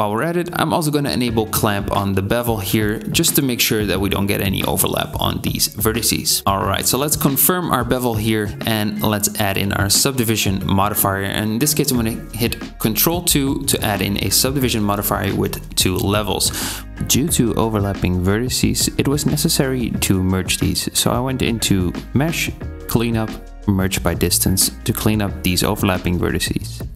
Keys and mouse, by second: 0.0-3.8 middle drag, 8.3 Tab, 9.3 ctrl+2, 18.4 Tab, 19.1 a, 20.9-22.2 middle drag, 25.9 Tab.